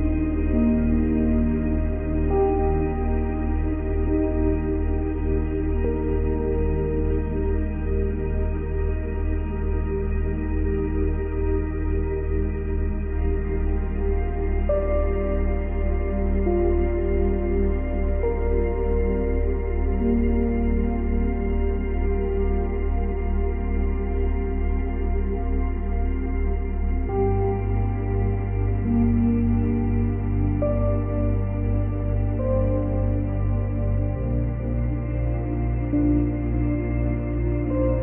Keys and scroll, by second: 10.8 space, 24.3 space, 35.0 space.